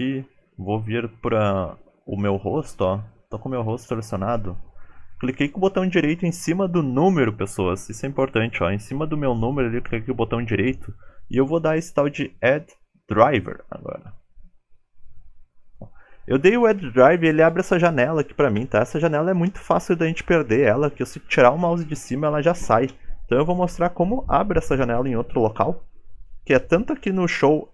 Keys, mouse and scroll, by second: 4.3 right click.